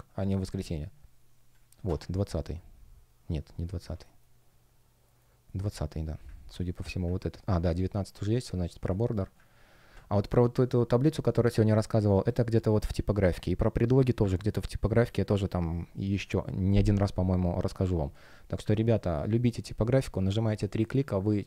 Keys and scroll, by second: 4.0 shift+щ, 5.0 shift+o, 8.6 space, 20.8 space.